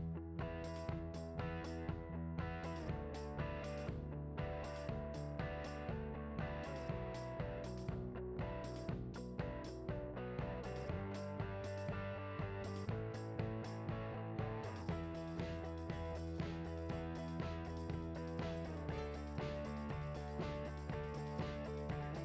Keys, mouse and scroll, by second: 4.0-5.9 scroll down 4, 4.1 `, 5.9-7.0 scroll down 1, 7.0-8.0 scroll down 1, 8.0 click, 8.8 KP_Decimal, 9.1 `, 10.6 click, 15.2 scroll up 1, 15.4 scroll down 1, 15.6 click, 16.8 s, 17.1 click, 17.6 KP_7, 17.9-18.3 scroll down 1, 18.5 g, 18.7 click, 18.9 KP_Decimal, 19.1 scroll down 2, 19.5 scroll up 2, 20.2 g, 21.0 click, 21.2 r, 22.1 g.